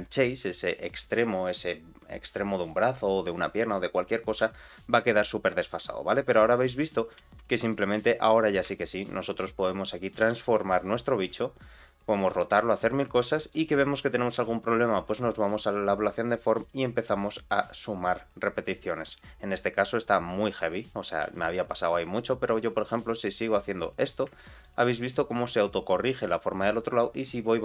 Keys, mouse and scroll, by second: 4.3 g, 6.0 middle click, 6.6 click, 7.1 z, 7.6 middle click, 8.1-8.6 scroll up 2, 8.7 shift+middle click, 9.1 scroll down 1, 9.8 click, 10.1 g, 11.1 r, 12.7-13.2 scroll up 2, 13.3 shift+middle click, 14.2 click, 16.5 click, 17.1 click, 17.7 click, 19.1 click, 19.6 r, 21.2 g, 24.0 scroll down 2, 24.3 shift+middle click, 26.2 click.